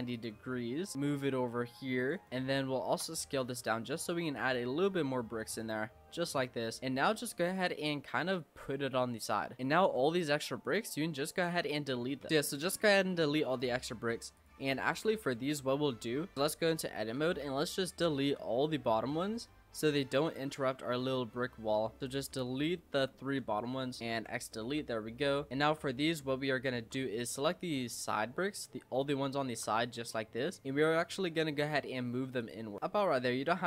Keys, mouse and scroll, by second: 0.9 click, 2.3 middle click, 2.3 scroll up 1, 2.6 shift+middle click, 3.2 s, 4.8 s, 6.4 click, 7.7-8.6 scroll up 3, 8.6 click, 9.6 middle click, 9.9-10.7 scroll down 2, 10.7 click, 11.4 l, 11.9 l, 12.3-13.3 middle drag, 13.3 scroll up 1, 13.5 middle click, 14.4 click, 14.7 Tab, 14.9 click, 15.3-16.2 middle drag, 16.2 Tab, 16.4 click, 17.1 l, 17.4 l, 17.8 l, 18.3 l, 18.4-20.3 middle drag, 20.3 l, 20.6 l, 20.9 l, 21.1 middle click, 22.0-24.1 typing, 24.6 Tab, 24.9 middle click, 25.5 click, 25.6 Tab, 25.8-27.0 middle drag, 27.0-27.6 scroll up 2, 27.6 click, 27.9 middle click, 28.4-28.9 scroll up 2, 28.9 shift+middle click, 29.8 click, 30.6 middle click, 31.6 shift+click, 32.4 shift+click.